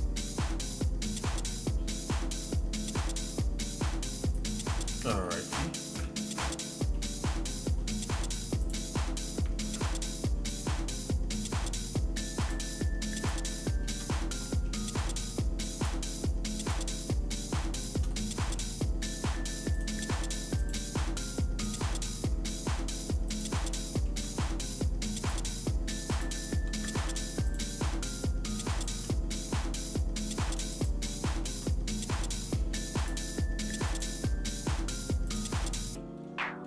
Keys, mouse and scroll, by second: 4.9 shift+middle click, 6.0 KP_Divide, 6.9 middle click, 7.5-8.3 scroll up 3, 8.7 click, 9.6 ctrl+Tab, 12.5 click, 13.3 shift+click, 13.6 shift+middle click, 14.1-14.5 scroll down 2, 14.5 middle click, 15.1 scroll up 1, 15.8 shift+click, 16.8 shift+click, 18.0 shift+click, 18.2 middle click, 19.7 shift+click, 20.8 shift+click, 21.8 shift+click, 23.6 shift+click, 23.7 shift+middle click, 24.3 middle click, 25.2 shift+click, 26.5 shift+click, 27.0 ctrl+z, 27.5 shift+click, 29.1 shift+click, 30.9 shift+click, 31.2 shift+middle click, 31.8 scroll down 1, 32.2 middle click, 33.0 shift+click, 34.0 shift+click, 35.3 shift+click, 35.8 middle click, 36.2 scroll up 2.